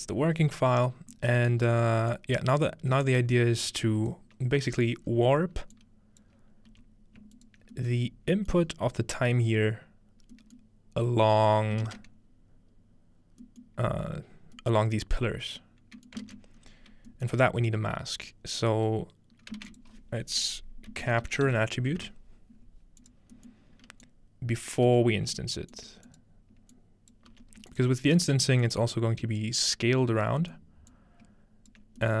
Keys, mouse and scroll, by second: 0.4 scroll up 1, 0.9 scroll down 1, 2.1-6.4 drag, 3.9-4.3 scroll down 1, 5.1-6.4 scroll up 1, 6.4-8.3 scroll down 1, 6.7 g, 7.4 click, 8.3-8.8 scroll up 3, 8.4 click, 10.8-12.6 scroll down 2, 13.6-14.6 scroll down 2, 14.6-15.5 scroll down 1, 16.6-17.5 scroll up 2, 17.4 typing, 17.5-18.0 scroll down 1, 18.3-19.3 drag, 19.6 typing, 19.8 shift+click, 20.9-22.5 typing, 23.0 click, 24.1-25.8 drag, 24.9 g, 25.9 click, 26.2 click, 27.3-32.2 ctrl+drag, 27.3 g, 30.4-32.0 middle drag.